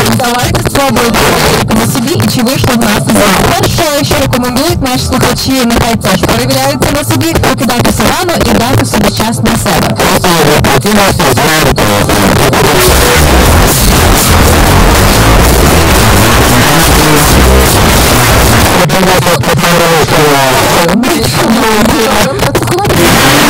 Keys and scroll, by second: 0.1 Return, 18.6 Page_Down.